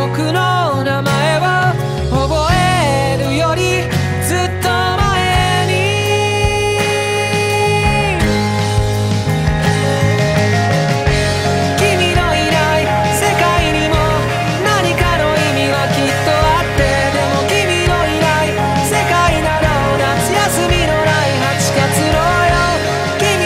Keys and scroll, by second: 2.4 ctrl+z, 3.3 ctrl+z, 4.3 ctrl+z, 8.3 ctrl+z, 9.5 ctrl+z, 9.8 ctrl+z, 10.2 ctrl+z, 10.9 ctrl+z, 12.2 ctrl+z, 12.4 ctrl+z, 13.1 ctrl+z, 21.3 ctrl+z, 22.3 ctrl+z.